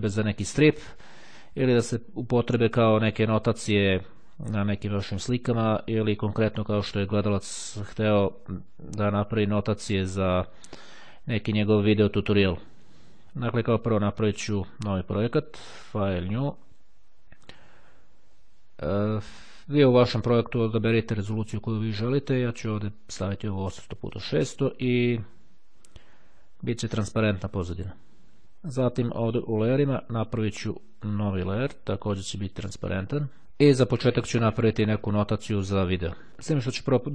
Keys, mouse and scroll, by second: 14.4-16.4 drag, 16.5 click, 24.3 click, 27.6 click, 29.1 click, 31.2 click, 32.9 click.